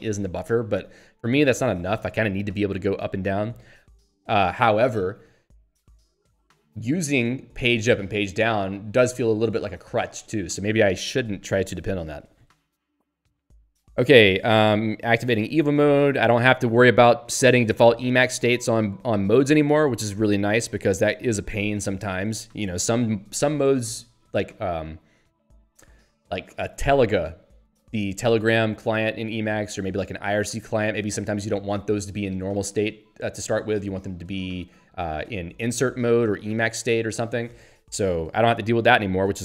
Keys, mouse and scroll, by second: 3.4 Down, 16.4 Up, 18.0 Down, 29.3 Down, 38.0 Up, 38.7 Down.